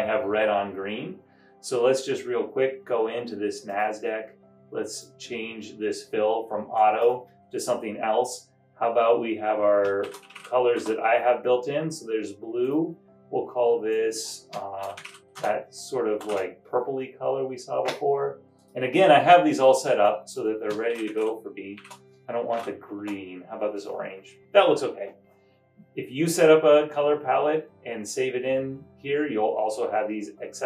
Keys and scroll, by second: 10.0-11.2 typing, 14.7-18.4 typing, 20.8-23.0 typing.